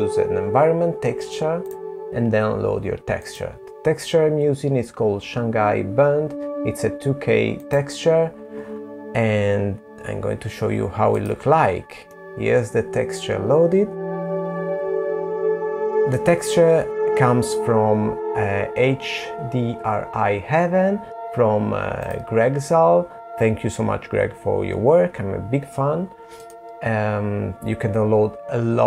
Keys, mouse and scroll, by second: 1.9 click, 8.5 click, 9.4 middle click.